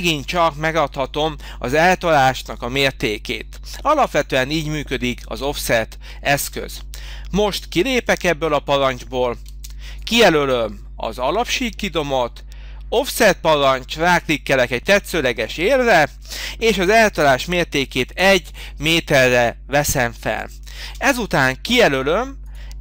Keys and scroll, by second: 6.4 space, 7.6 Escape, 9.5 space, 17.4 1, 18.2 Return, 21.0 space.